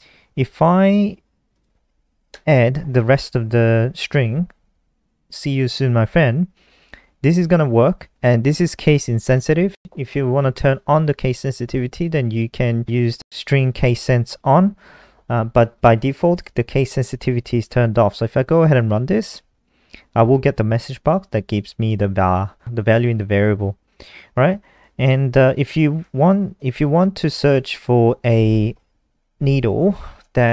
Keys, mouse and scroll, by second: 1.9 click, 2.4 Right, 6.9 Right, 6.9 BackSpace, 9.7 ctrl+s, 18.7 F5, 24.4 click, 25.6-26.5 scroll down 1, 27.2 ctrl+c, 27.5 click, 27.7 click.